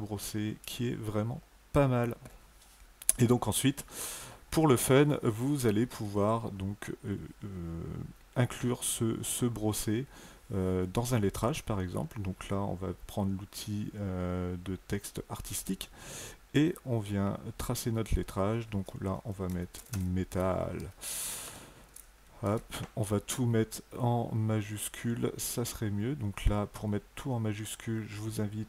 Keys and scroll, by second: 19.4 alt+KP_1, 20.4-21.9 typing, 22.4 ctrl+a.